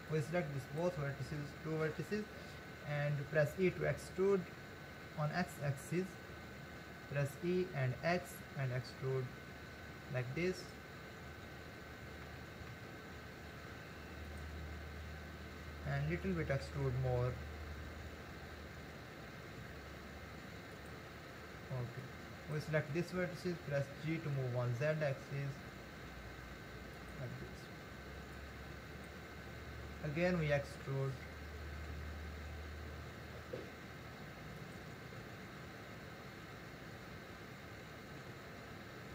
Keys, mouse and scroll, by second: 0.1 click, 3.7 e, 12.3 g, 16.5 e, 22.0 click, 23.8 g, 28.4 click, 30.7 e, 37.0 e.